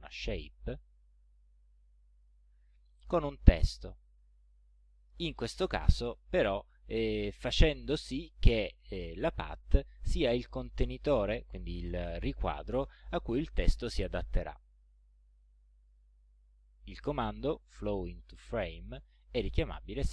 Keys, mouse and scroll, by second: 2.2 click, 3.3 shift+click, 4.1 shift+click, 15.9 click.